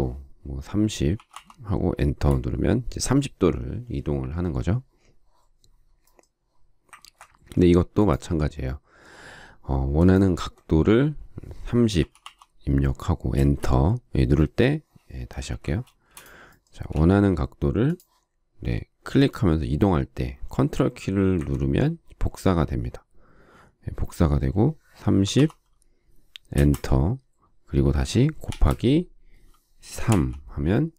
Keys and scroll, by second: 0.9-1.8 typing, 1.9 Return, 7.0 ctrl+z, 11.7-12.7 typing, 13.3 Return, 15.5 ctrl+z, 15.8 space, 16.9 q, 25.0-25.8 typing, 26.5 Return, 28.4 shift+8, 30.0 typing.